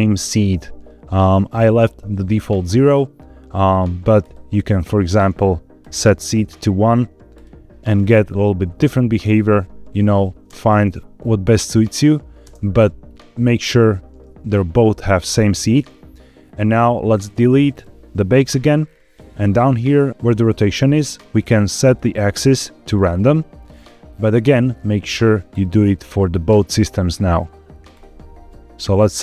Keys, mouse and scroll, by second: 1.0-2.2 drag, 4.1 click, 4.8-5.8 drag, 6.3-7.2 scroll down 2, 7.2 click, 8.2-9.2 drag, 9.8 click, 10.3 space, 12.3 space, 13.0-14.2 scroll up 4, 15.8-16.3 scroll down 2, 16.3-16.7 scroll up 1, 17.0 click, 17.6 click, 18.1-19.0 scroll down 4, 21.7-22.8 drag, 23.6-24.6 scroll up 5, 24.6 scroll up 1, 25.4 click, 25.8-27.7 scroll down 6, 27.8-29.2 drag.